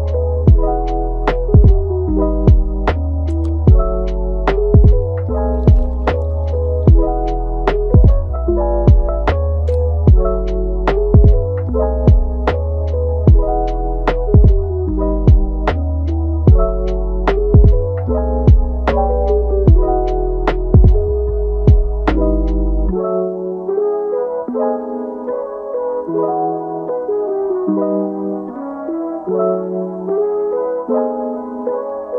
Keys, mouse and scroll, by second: 4.7 Tab, 6.0 click, 6.4 g, 8.0 Tab, 8.1 scroll down 3, 8.6-9.4 middle drag, 9.4-9.9 scroll up 7, 10.8 click, 12.9-18.6 right drag, 19.3 scroll down 3, 19.6-20.4 middle drag, 20.4 scroll up 3, 21.3-23.9 middle drag, 23.9-24.3 scroll down 3, 24.3-25.1 middle drag, 25.1-25.6 scroll up 1, 25.6 scroll down 4, 25.8-28.3 middle drag, 28.3-28.8 scroll down 1, 28.8 scroll up 3, 29.4 click, 30.4 click, 32.0-32.1 drag.